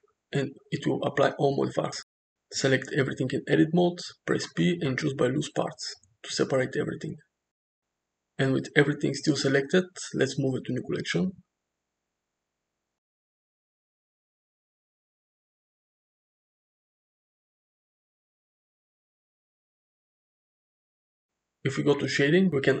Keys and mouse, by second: 2.6 Tab, 3.4 a, 4.1 p, 6.6 m, 7.8 Tab, 8.8 m, 16.9 Tab, 17.1 drag, 17.7 click, 17.9 g, 19.5-20.6 middle drag.